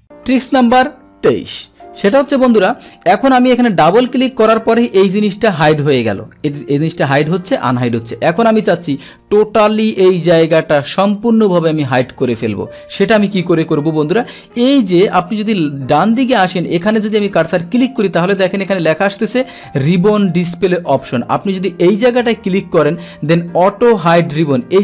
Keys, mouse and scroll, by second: 3.7 click, 3.9 click, 4.8 click, 5.1 click, 24.7 click.